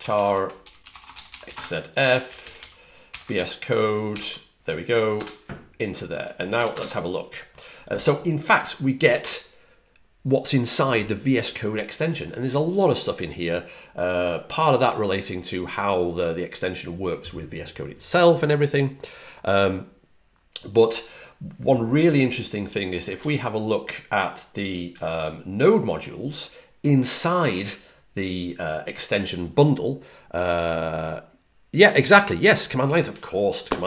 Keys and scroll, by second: 0.0-2.1 typing, 3.7-5.0 typing, 6.4 typing, 23.0 typing, 24.5 j, 24.8 j.